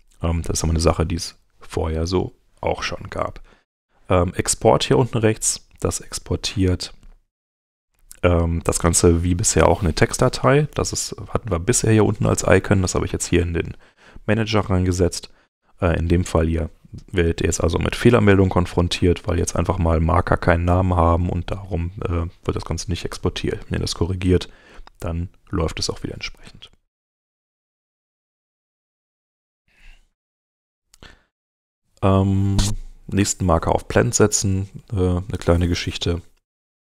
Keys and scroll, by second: 26.9 super+Tab, 28.3 super+Tab.